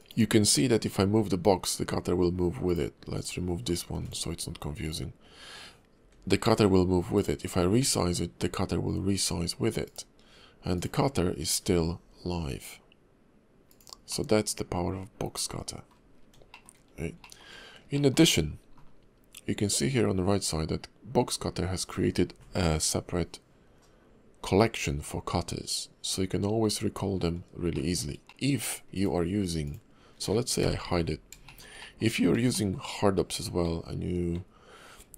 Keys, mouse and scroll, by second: 0.0 click, 1.0 g, 3.2 click, 3.9 x, 4.5 scroll up 1, 4.8 click, 5.2-5.9 scroll down 1, 5.9 g, 7.4-7.7 scroll down 2, 7.7 s, 10.1-10.5 scroll up 2, 10.7 click, 11.6 g, 14.1 middle click, 16.1-16.4 scroll down 2, 16.5 shift+middle click, 16.7-17.1 scroll up 2, 17.2 shift+middle click, 17.9 shift+middle click, 27.7 shift+middle click, 28.3 middle click, 28.9 click, 29.6 click, 30.6 h, 31.0 scroll down 2, 31.4 shift+middle click, 31.8 middle click, 32.1 scroll up 2, 32.5 middle click, 33.6 alt+w, 34.3 alt+w, 34.8 scroll up 2.